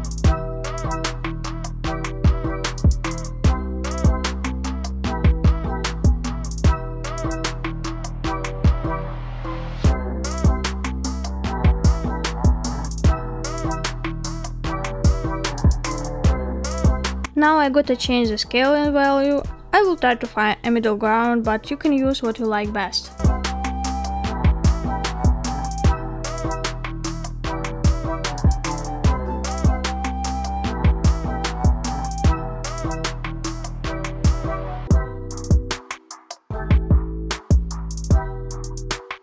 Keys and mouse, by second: 1.0-1.7 middle drag, 2.2-2.5 shift+middle drag, 2.7-3.3 middle drag, 5.8-7.8 middle drag, 8.6-9.3 shift+middle drag, 11.3-16.0 drag, 16.3 middle click, 17.1 shift+middle click, 17.1 shift+click, 17.3 shift+middle click, 19.6-22.3 drag, 22.8-24.4 middle drag, 26.2-28.3 drag, 30.0-31.1 middle drag, 31.7-32.0 shift+drag, 32.0 shift+middle click, 33.5-34.4 middle drag, 35.7 middle click, 36.2 middle click, 37.8-39.2 drag.